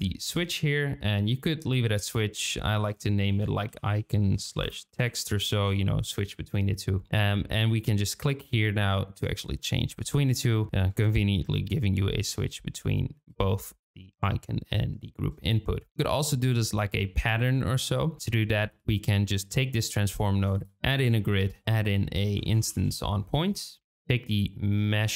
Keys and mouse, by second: 2.0-6.2 drag, 7.1 n, 9.1 click, 12.1 shift+middle click, 14.8 shift+click, 18.1 ctrl+click, 18.7 shift+click, 19.9 shift+click, 20.2 shift+a, 23.8 Down, 23.9 Down, 24.0-25.1 drag.